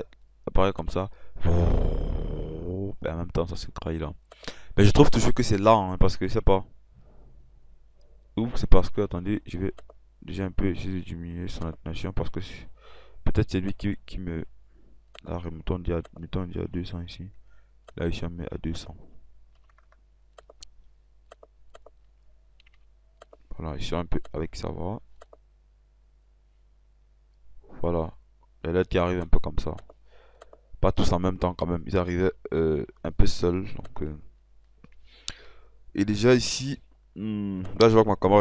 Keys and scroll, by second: 16.8 KP_2, 17.1 0, 19.6 2, 22.8 Delete, 31.4 ctrl+F6, 37.0 ctrl+F6.